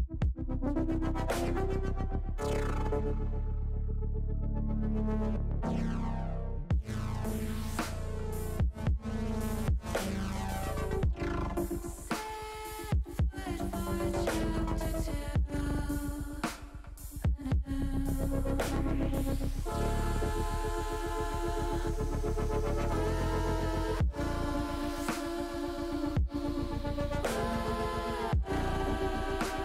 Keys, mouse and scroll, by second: 2.1 click, 3.2-6.0 drag, 7.8-10.2 drag, 11.0 r, 11.7 click, 12.9-14.7 drag, 15.1 ctrl+z, 16.0 click, 17.9-19.2 drag, 19.5 ctrl+z, 20.5 middle click, 21.4 middle click, 22.7 ctrl+z, 23.1 ctrl+z, 23.5 ctrl+z, 24.8 click, 26.3-28.3 drag, 29.1 click.